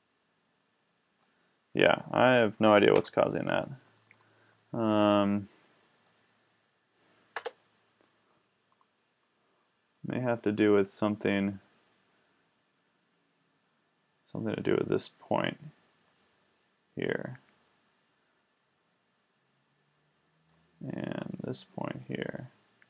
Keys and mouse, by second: 3.0 KP_1, 4.1-6.0 middle drag, 6.0 right click, 6.4 right click, 7.4 Tab, 11.3-13.4 middle drag, 16.1-17.9 middle drag, 17.9-18.8 drag.